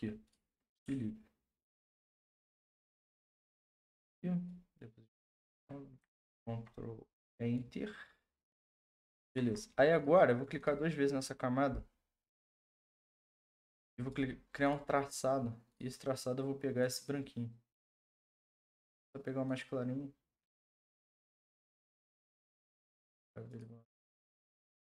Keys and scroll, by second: 5.5 ctrl+z, 6.2 ctrl+Return, 9.2 ctrl+d.